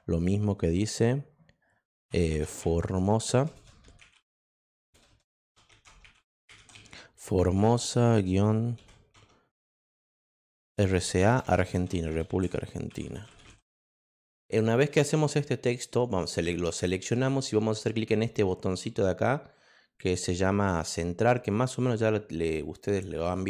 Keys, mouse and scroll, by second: 2.3-7.1 typing, 8.8-13.9 typing, 15.6 click.